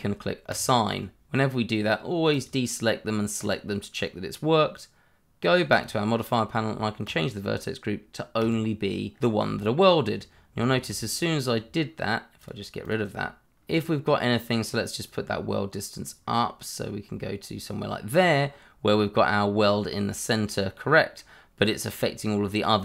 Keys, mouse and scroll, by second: 0.5 click, 5.7 click, 10.7 ctrl+z, 12.4 click, 12.8 double click, 13.8 Tab, 14.1 middle click, 15.4 click, 18.9-19.3 scroll up 1, 19.3-19.6 scroll down 1, 19.6 middle click, 21.8-22.8 scroll up 1.